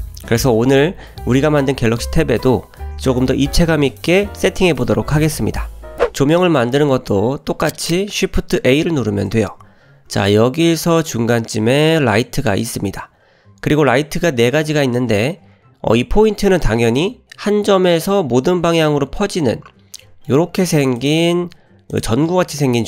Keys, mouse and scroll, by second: 8.9 shift+a, 19.2-20.0 scroll down 3, 20.0-20.3 middle drag, 20.3-20.6 scroll up 2, 20.6 g, 21.9 click, 22.2 scroll up 2, 22.6 s.